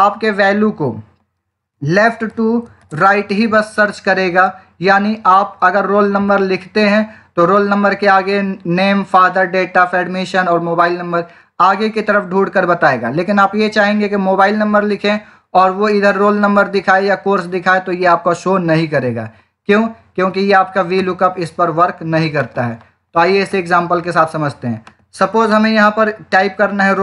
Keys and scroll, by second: 2.7 shift+., 20.9 Return, 23.2 Escape.